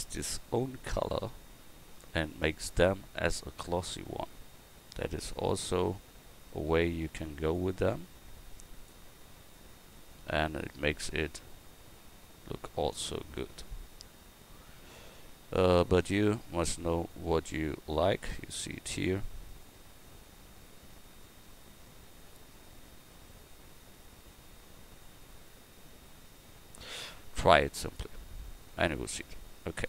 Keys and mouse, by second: 2.0-3.8 drag, 5.6-9.6 drag, 9.6-10.9 middle drag, 11.2 click.